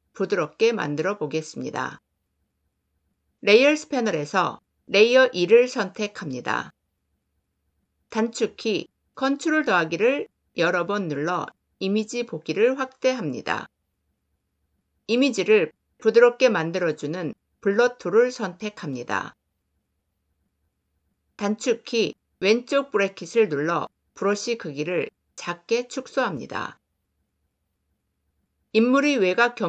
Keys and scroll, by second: 8.1 ctrl++, 21.2 [.